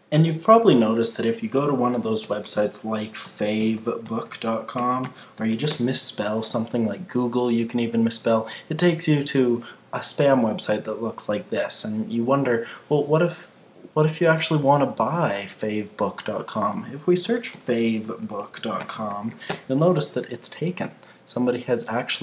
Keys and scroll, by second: 2.2 super+t, 5.7 Return, 19.5 Return.